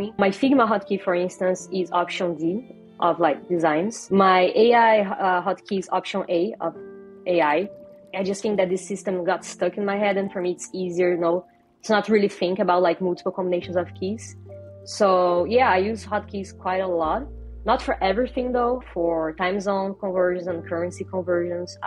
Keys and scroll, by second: 5.5 alt+a.